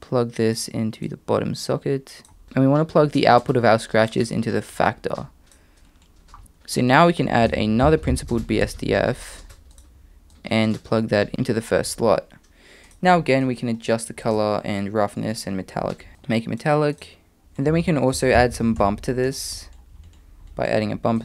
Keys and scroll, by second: 7.4 shift+a, 17.9 shift+a.